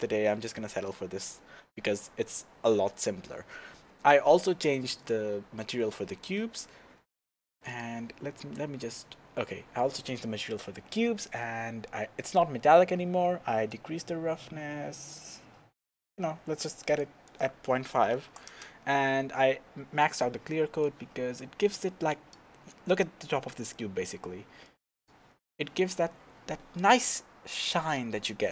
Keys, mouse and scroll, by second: 0.6-1.1 scroll down 2, 1.1-2.6 scroll up 3, 2.6-3.3 scroll up 1, 3.3-5.0 scroll up 1, 5.0 click, 8.4 KP_0, 9.4 scroll up 1, 13.7-28.5 drag, 18.6 KP_Enter.